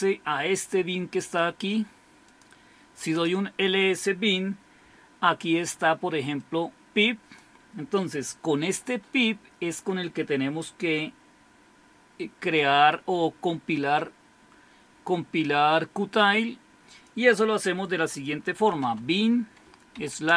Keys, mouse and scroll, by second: 0.0-3.1 drag, 3.2 Return, 6.4 click, 12.4 click, 16.9 click, 18.3-20.0 typing.